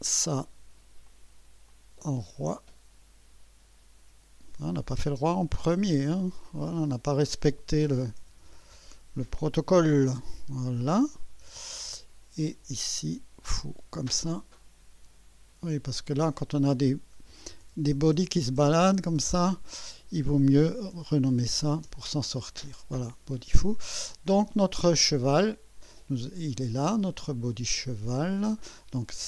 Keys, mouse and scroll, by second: 0.1 F2, 1.1 click, 1.7-4.7 drag, 5.6-6.8 typing, 8.0 BackSpace, 9.7-10.8 typing, 11.5 Return, 12.9 click, 13.7 F2, 15.9 click, 17.3 BackSpace, 19.8-21.4 typing, 21.9 Return, 22.4 Return.